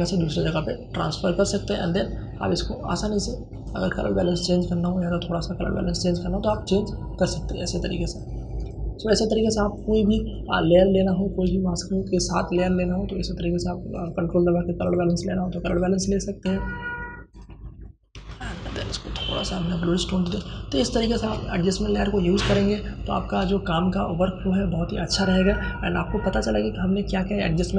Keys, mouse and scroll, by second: 8.7 ctrl+space, 9.1 ctrl+click, 9.2 ctrl+space, 10.3-19.8 drag, 19.8 ctrl+space, 20.1 ctrl+click, 20.3 ctrl+space.